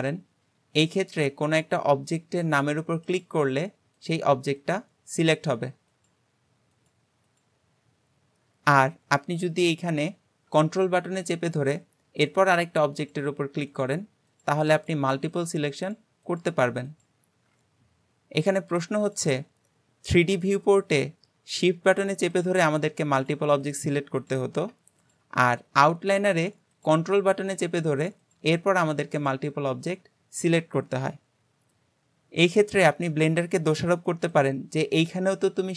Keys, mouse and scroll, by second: 3.0 click, 4.0 click, 4.6 click, 5.2 click, 5.9 click, 6.8 click, 7.2 click, 12.3 ctrl+click, 13.0 ctrl+click, 13.7 ctrl+click, 14.3 ctrl+click, 14.8 ctrl+click, 15.3 ctrl+click, 15.8 ctrl+click, 16.2 ctrl+click, 16.9 click, 19.0 click, 22.4 click, 22.8 shift+click, 23.2 shift+click, 23.7 shift+click, 24.2 click, 25.1 click, 26.8 click, 27.6 ctrl+click, 28.2 ctrl+click, 29.2 ctrl+click, 34.4 click.